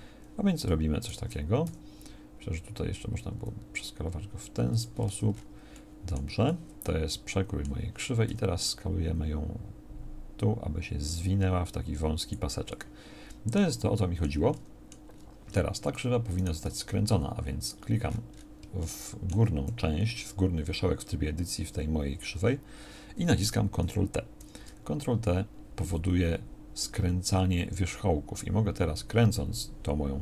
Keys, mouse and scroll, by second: 1.7 s, 5.1 Tab, 8.3 s, 16.7 Tab, 16.7-18.7 drag.